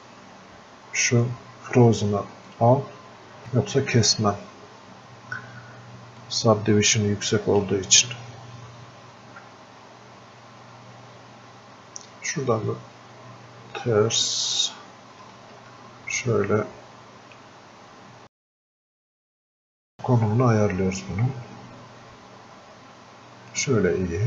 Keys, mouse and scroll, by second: 2.5 click, 6.3-12.4 ctrl+shift+drag, 12.4-15.4 ctrl+shift+drag, 15.4 ctrl+shift+space, 20.6 space.